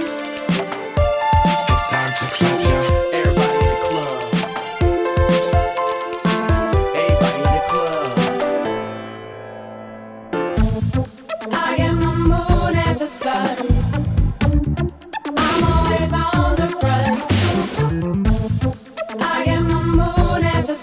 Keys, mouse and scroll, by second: 10.4 click, 15.1-16.6 drag, 16.6-18.0 drag, 18.1-20.8 drag.